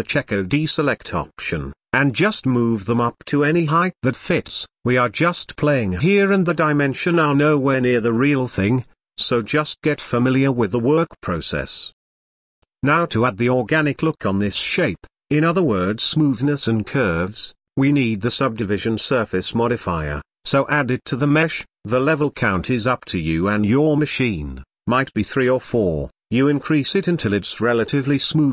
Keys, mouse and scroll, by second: 3.4-4.0 scroll down 4, 4.0-6.1 middle drag, 6.1-7.0 scroll up 2, 7.0 g, 10.5 Tab, 10.8 n, 12.8-15.3 middle drag, 17.9 drag, 18.6-20.2 drag, 21.2-23.4 drag, 23.4-27.6 middle drag.